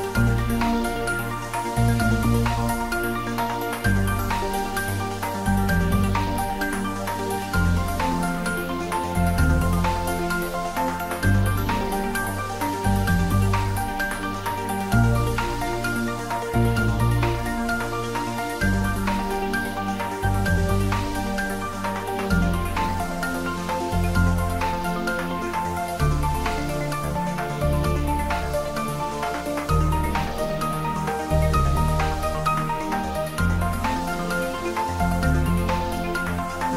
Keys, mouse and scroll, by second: 0.2 middle click, 1.1 Tab, 1.7 middle click, 2.2 3, 2.5 click, 3.1 s, 5.2 click, 5.4 Tab, 5.7 middle click, 6.8 ctrl+Tab, 7.2 ctrl+r, 7.5 click, 8.0 middle click, 9.6 s, 10.2 click, 10.3 Tab, 10.5-12.4 middle drag, 12.4 Tab, 13.0 ctrl+r, 13.2 click, 13.7 g, 15.7 click, 15.9 Tab, 16.0 middle click, 16.9 Tab, 17.3 middle click, 17.7-18.6 typing, 18.7 click, 18.9-20.1 middle drag, 20.1 click, 20.4 shift+middle click, 20.7-21.6 typing, 22.8 click, 23.5-25.6 ctrl+middle drag, 25.6 shift+middle click, 26.2 right click, 26.9 click, 27.4 right click, 27.7 click, 28.1-30.8 middle drag, 30.8 click, 31.1-33.2 ctrl+middle drag, 33.2 shift+click, 34.0 middle click, 34.6 click, 36.1 s.